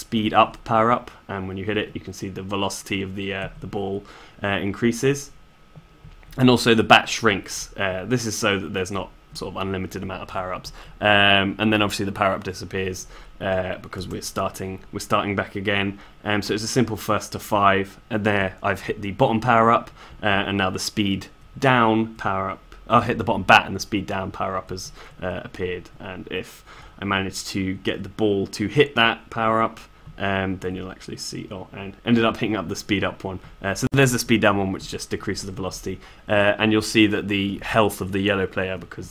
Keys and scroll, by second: 5.7 shift+s, 17.6 s.